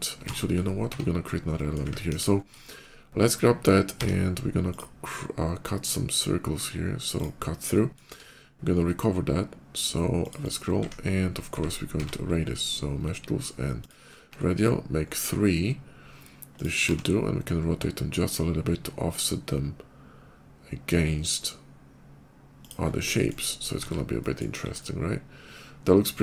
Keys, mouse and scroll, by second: 0.4 ctrl+z, 0.6 Tab, 1.4 middle click, 1.9 KP_5, 2.5 middle click, 3.8 d, 4.5 click, 5.6-6.9 drag, 7.0 click, 7.6 middle click, 8.0 q, 10.1 click, 10.3 click, 11.8 q, 13.7 ctrl+click, 14.9 ctrl+middle click, 16.4 ctrl+click, 16.7 r, 19.3 r, 22.5 click, 22.6 scroll down 1, 22.8 middle click, 23.6 shift+2, 24.1 middle click, 24.3 KP_5, 24.5-26.2 middle drag.